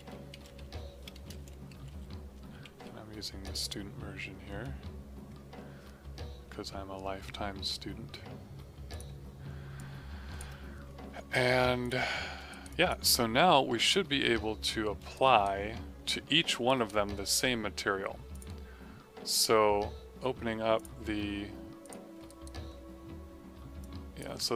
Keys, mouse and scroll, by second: 0.0-3.1 typing, 3.4 click, 8.8 click, 12.5 right click, 12.7 click, 15.1 right click, 15.7 middle click, 16.0 middle click, 16.6 right click, 18.2 click, 20.7 click, 22.2 right click, 23.7 click.